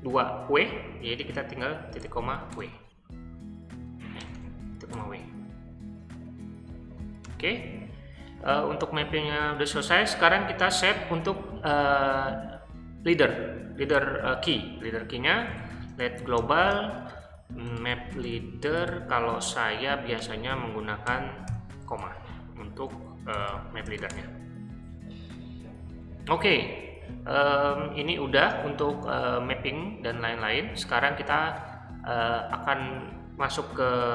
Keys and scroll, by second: 2.0 ;, 2.5 w, 4.2-5.4 typing, 7.2 Return, 13.9 o, 15.2-22.0 typing, 23.1-24.5 typing, 33.5-34.1 typing.